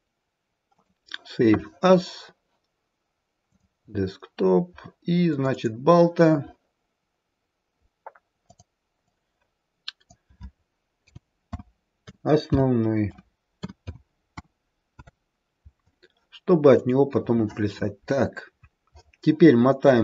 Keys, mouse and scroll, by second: 19.6-20.0 scroll up 13.